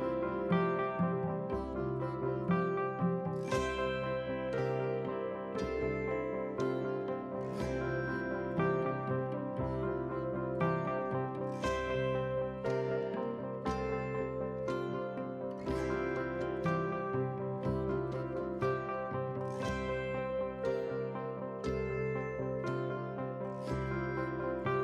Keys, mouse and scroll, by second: 1.6 drag, 2.2 click, 2.5-3.7 drag, 3.9 click, 5.1 click, 5.6 shift+d, 7.1 KP_7, 7.6 s, 8.7 g, 9.9 g, 10.9 s, 12.1 shift+d, 13.5 shift+click, 13.8 KP_3, 14.1-14.6 scroll up 1, 14.6 g, 16.5 scroll down 1, 16.7 middle drag, 17.1 scroll down 1, 17.2 middle drag, 17.6 click, 18.0 KP_7, 18.8 shift+d, 20.3 r, 21.0 shift+d, 22.4-24.8 typing.